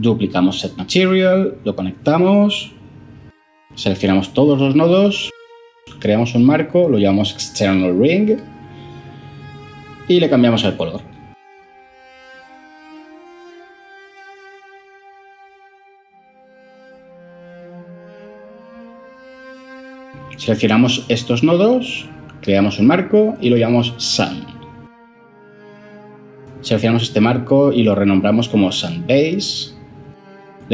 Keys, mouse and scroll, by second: 0.8 ctrl+c, 1.1 ctrl+v, 4.4 ctrl+j, 5.1 F2, 5.5-7.5 typing, 7.8 Return, 21.7 ctrl+j, 22.5 F2, 23.2-23.8 typing, 24.4 Return, 27.8 F2, 28.1 Tab, 28.3-29.5 typing.